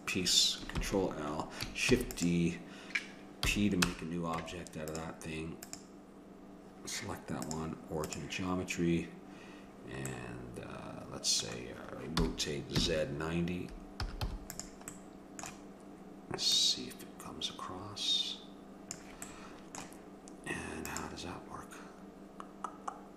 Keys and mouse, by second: 0.8 ctrl+l, 2.0 shift+d, 3.5 p, 4.4 Tab, 6.0-9.4 drag, 10.1 middle click, 12.2 r, 15.0 click, 16.5-18.4 drag, 19.3-21.8 middle drag.